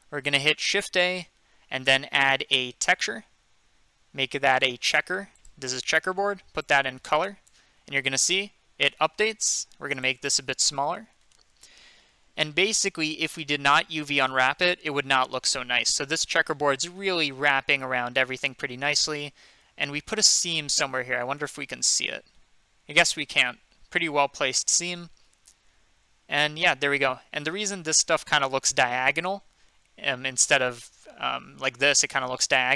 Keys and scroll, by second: 0.8 typing, 3.3-4.0 typing, 10.8-11.2 typing.